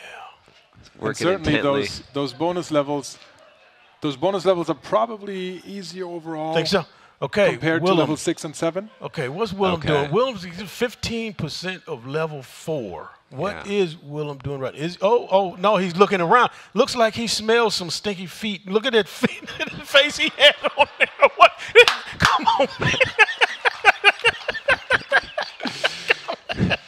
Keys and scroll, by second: 3.0 ctrl+Page_Up, 3.2 ctrl+Page_Up, 3.3 ctrl+Page_Up, 3.5 ctrl+Page_Up, 5.3 ctrl+shift+Right, 5.6 ctrl+c, 6.0 ctrl+Page_Down, 7.8 ctrl+Page_Up, 8.4 ctrl+Page_Down, 8.6 ctrl+Page_Down.